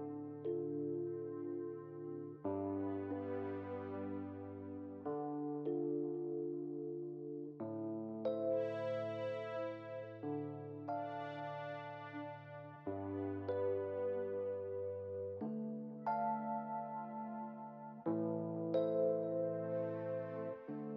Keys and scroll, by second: 7.4 1, 11.8 w.